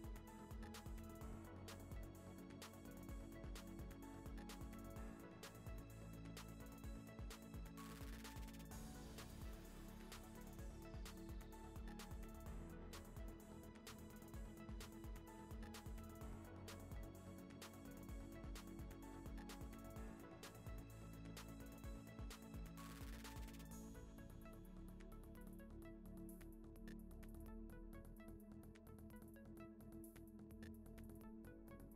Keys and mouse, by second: 0.0 i, 1.0 middle click, 1.4 3, 1.4 x, 2.0 click, 2.1 x, 2.3 shift+middle click, 2.9 click, 3.9 x, 3.9 1, 4.0 click, 4.4 g, 4.9 middle click, 5.0 a, 5.3 alt+e, 6.5 Tab, 6.8 click, 7.6 middle click, 9.8 shift+right click, 9.9 shift+a, 11.0 click, 11.4 Tab, 11.6-14.0 typing, 13.4 shift+middle click, 14.9 middle click, 15.3 g, 16.0 middle click, 16.3 e, 16.7 i, 17.1 g, 19.2 s, 19.3 shift+middle click, 19.5 e, 20.4 middle click, 21.2 3, 21.3 alt+click, 21.4 shift+s, 21.6 Tab, 21.7 shift+a, 22.7 shift+a, 24.8-28.5 typing, 25.1 shift+middle click, 26.3 middle click, 27.6 middle click, 28.2 middle click, 28.4 Tab, 29.4 click, 30.8 click.